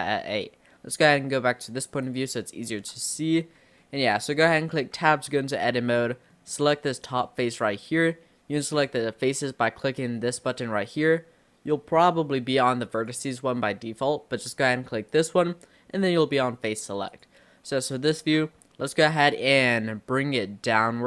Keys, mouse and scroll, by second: 2.1 click, 2.7 scroll down 4, 3.2-3.6 scroll up 2, 3.8-5.0 shift+middle drag, 5.0 Tab, 6.1-7.1 middle drag, 7.1 click, 13.0 click, 15.1 click, 17.1 click, 18.0 scroll up 1, 18.8-20.4 shift+middle drag, 20.4 click.